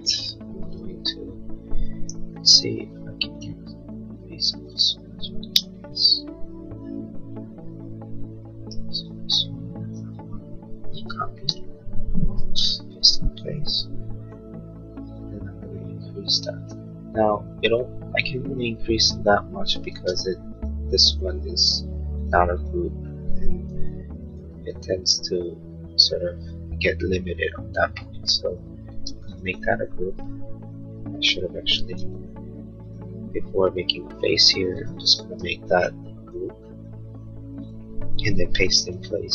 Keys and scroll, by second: 2.0 l, 5.5 space, 10.9 ctrl+c, 11.3 space, 11.5 Escape, 13.8 p, 19.9 space, 23.8 p, 28.1 Escape, 28.9 space, 32.0 ctrl+z, 36.3 g.